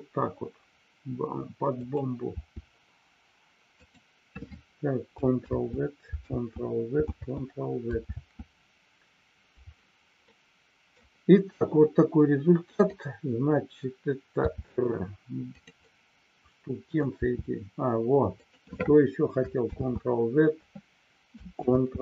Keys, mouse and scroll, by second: 1.7 click, 3.7 click, 5.6 ctrl+z, 7.2 ctrl+z, 8.2 ctrl+z, 10.2 middle click, 12.7 click, 15.5 click, 15.8-17.0 middle drag, 18.4 click, 19.8 ctrl+z, 21.7 ctrl+z.